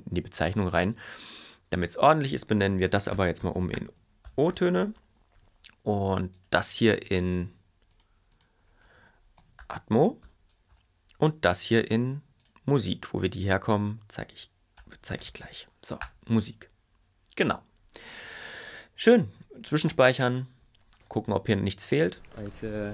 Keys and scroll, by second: 2.9-4.2 typing, 9.1-10.1 typing, 14.8 shift+m, 15.1 u, 19.8 super+a, 22.1 space.